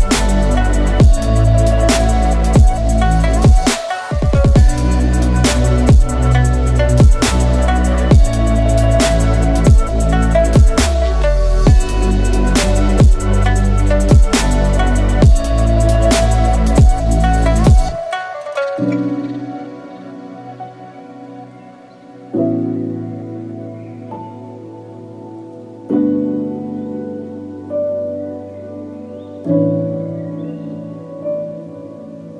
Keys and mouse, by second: 1.8 alt+click, 2.9 alt+shift+click, 3.4 alt+shift+click, 3.9 alt+shift+click, 5.2 a, 5.9 middle click, 6.3 shift+middle click, 6.8 alt+click, 7.3 alt+shift+click, 8.3 alt+shift+click, 9.2 alt+shift+click, 9.9 shift+click, 10.3 x, 11.6 ctrl+z, 12.3 a, 12.6 ctrl+s, 13.1 middle click, 14.1 Tab, 14.7-15.2 middle drag, 16.2 KP_Divide, 17.0 h, 17.5 shift+middle drag, 18.5 KP_Divide, 18.9 Tab, 19.6 ctrl+s, 19.9 middle click, 21.2 3, 21.5 click, 22.4 ctrl+click, 22.8 ctrl+click, 23.2 ctrl+click, 23.5 ctrl+click, 23.9 shift+click, 24.1 shift+click, 24.3 shift+click, 24.5 shift+click, 24.9 f, 25.2 a, 25.6 middle click, 26.6 click, 27.1 ctrl+click, 27.6 ctrl+click, 28.1 ctrl+click, 28.4 ctrl+click, 28.8 ctrl+click, 29.0 ctrl+click, 29.2 ctrl+click, 29.7 f, 29.9 a, 30.3 middle click.